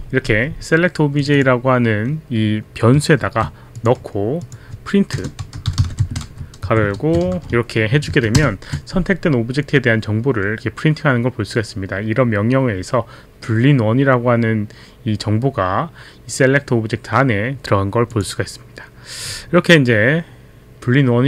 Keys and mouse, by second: 1.2 click, 3.2 ctrl+c, 3.7 click, 4.4 click, 5.1-7.4 typing, 7.4 ctrl+v, 8.1 ctrl+a, 8.3 ctrl+a, 8.3 ctrl+Return, 9.0 ctrl+Return, 18.1 click.